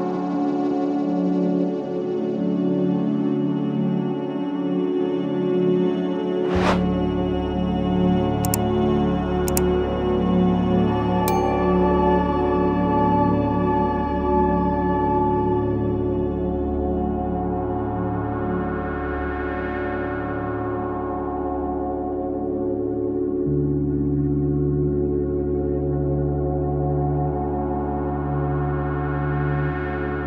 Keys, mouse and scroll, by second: 0.6 Tab, 1.2 click, 1.5 Tab, 1.9 a, 2.4 e, 3.7 KP_1, 4.9-5.7 scroll up 2, 5.7-6.4 scroll up 1, 6.4 click, 7.0 click, 7.2 Tab, 7.7 Tab, 8.3 1, 8.7 click, 9.6 shift+z, 9.9 click, 10.2 shift+z, 10.7 g, 12.8-14.3 middle drag, 15.0 ctrl+z, 15.1 ctrl+z, 15.4 ctrl+z, 15.7 ctrl+z, 15.8 ctrl+z, 16.0 ctrl+z, 16.2 ctrl+z, 16.7 ctrl+z, 16.9 ctrl+z, 17.1 ctrl+z, 17.9 g, 18.4 ctrl+z, 18.6 ctrl+z, 18.8 ctrl+z, 19.4 middle click, 19.8 shift+d, 20.6 p, 21.4 Tab, 21.6 click, 21.9 Tab, 22.4 a, 22.6 middle click, 23.4 1, 23.7 click, 24.2 KP_1, 24.8 g, 25.9 click, 26.2 g, 28.5 a, 28.7 middle click, 29.5 e.